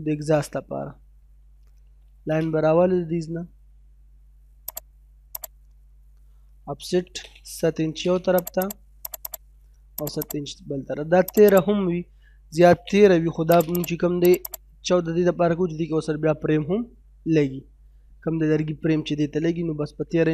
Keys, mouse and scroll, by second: 0.1 scroll up 1, 0.4 middle click, 1.4 l, 1.7 space, 1.9-2.7 scroll up 1, 4.7 click, 6.4 o, 6.6 space, 7.2 7, 7.4 space, 7.7-8.1 scroll up 1, 8.4 click, 10.6 scroll up 1, 11.3 click, 11.9-13.2 typing, 13.1 scroll down 1, 13.5 click, 14.9-15.2 scroll down 1, 15.2 middle click, 17.2 scroll down 1, 17.5 middle click.